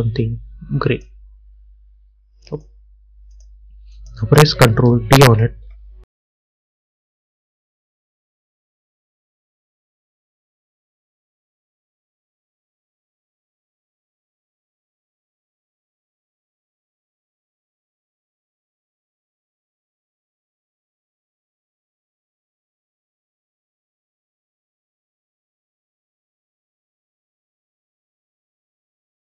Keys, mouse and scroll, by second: 5.3 ctrl+d, 7.1 click, 10.7 click, 18.6 Return, 19.9 click, 24.1 Return, 24.9 click, 27.9 ctrl+d.